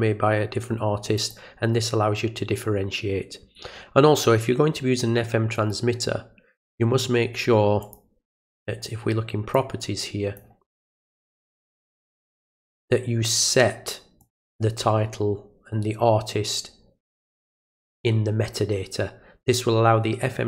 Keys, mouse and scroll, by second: 1.2 click, 5.6 right click, 7.8 click, 9.5-10.4 drag, 11.6 click, 14.2 click.